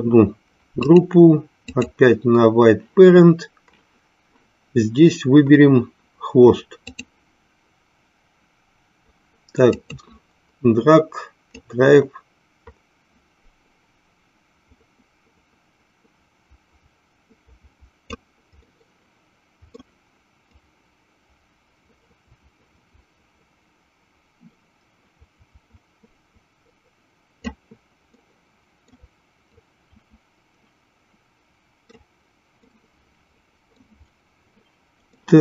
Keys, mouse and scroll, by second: 0.9-2.0 drag, 6.9-9.9 drag, 11.7-18.2 drag, 18.8-19.9 middle drag, 20.6-27.6 drag, 28.3 middle click, 29.8-32.2 drag, 32.7-34.0 middle drag, 35.2 middle click.